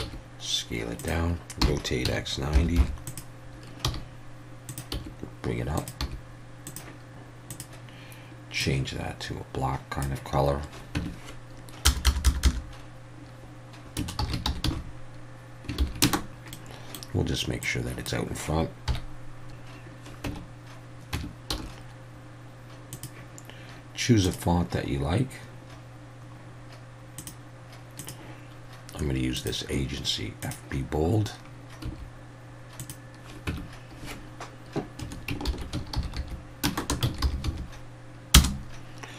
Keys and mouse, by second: 0.0 s, 1.0 click, 1.6 r, 2.0 x, 2.5 9, 2.8 0, 3.0 click, 3.8 g, 4.7 click, 4.9 s, 5.8 click, 6.0 g, 6.7 click, 7.5 click, 11.0 Tab, 11.9 BackSpace, 12.1 BackSpace, 12.3 BackSpace, 12.4 BackSpace, 14.2 n, 14.3 a, 14.5 m, 14.6 e, 15.8 shift+;, 16.0 space, 16.3 Tab, 16.5-16.9 middle drag, 17.6 click, 18.9 KP_1, 20.3 Tab, 21.1 Tab, 21.5 s, 22.9 click, 24.3 drag, 27.2 drag, 28.0 click, 31.8 s, 32.8 click, 33.5 Tab, 35.5-37.4 typing, 38.3 Return.